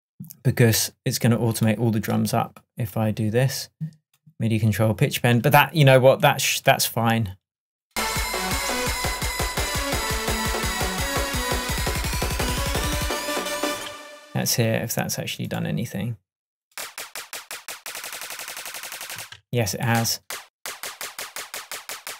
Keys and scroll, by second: 13.8 space, 19.3 space.